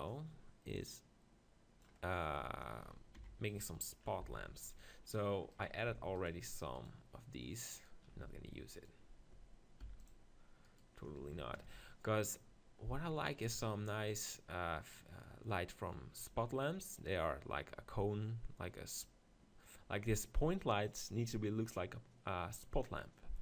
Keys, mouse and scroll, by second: 0.8-1.8 drag, 2.1 click, 2.7 middle click, 3.2 KP_7, 4.2 z, 5.5-12.6 right drag, 8.2 c, 9.9 x, 12.6 middle click.